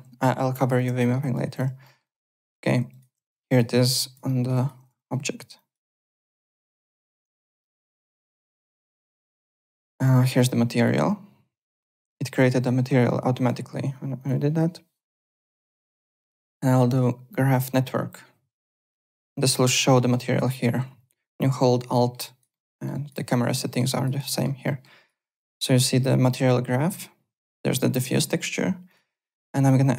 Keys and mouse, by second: 0.7 click, 1.0 alt+middle click, 1.2 alt+click, 1.8 alt+middle click, 2.0 alt+right click, 2.2 alt+click, 2.9 alt+right click, 2.9-3.8 typing, 3.5 click, 4.2 alt+middle click, 4.5 alt+right click, 4.7 alt+w, 4.9 3, 4.9 click, 5.5 click, 5.9 `, 5.9 click, 6.6 alt+middle click, 7.6 m, 8.6 n, 8.6 click, 10.0 click, 13.3 click, 14.1 click, 15.5 click, 16.5 right click, 19.8 alt+middle click, 21.9 alt+middle click, 22.2 alt+right click, 22.5 alt+middle click, 22.9 alt+right click, 23.6 alt+middle click, 23.8 alt+right click, 24.2 alt+middle click, 24.8 alt+right click, 27.4 click, 28.9 click.